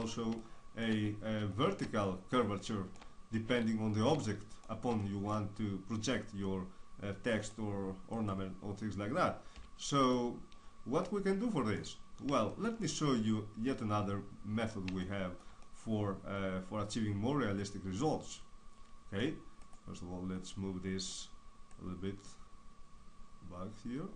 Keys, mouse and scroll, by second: 7.4-10.5 right drag, 9.5 x, 10.5-12.5 middle drag, 12.9-13.9 middle drag, 15.0-17.2 middle drag, 21.0-22.2 right drag, 22.2-23.9 drag.